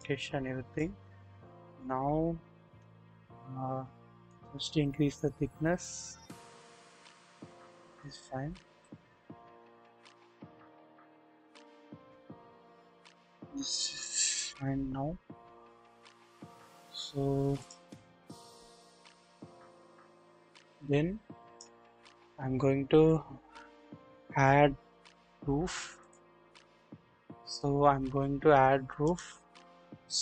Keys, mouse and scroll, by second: 0.0 click, 1.0 scroll up 1, 1.7 click, 4.3-7.5 middle drag, 8.3-8.9 scroll down 1, 8.9-16.9 middle drag, 18.4 scroll up 1, 19.5-21.7 drag, 22.2 scroll up 1, 25.2-26.8 scroll down 2, 27.7 scroll up 1, 29.0 middle click, 29.3-29.9 scroll up 1, 29.9-30.2 scroll down 1.